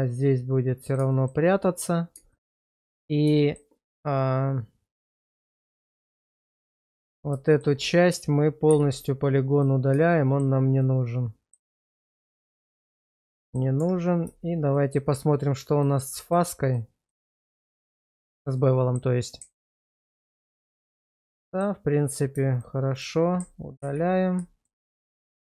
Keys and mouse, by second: 1.2 shift+middle click, 2.3 shift+middle click, 3.4 shift+middle click, 5.5 Tab, 5.9 click, 6.8 Tab, 7.0 click, 7.5 shift+middle click, 7.8 middle click, 8.7 x, 10.1 shift+middle click, 10.8 middle click, 11.8 Tab, 12.4 shift+middle drag, 12.9-13.2 middle drag, 13.4 shift+middle click, 13.8 Tab, 14.8 shift+middle click, 17.1 middle click, 18.3 middle click, 18.6 middle click, 20.2 ctrl+x, 20.6 shift+middle click, 21.1 middle click, 22.0 click, 22.9 shift+click, 23.8 ctrl+x, 24.7 shift+middle click, 25.1 shift+middle click.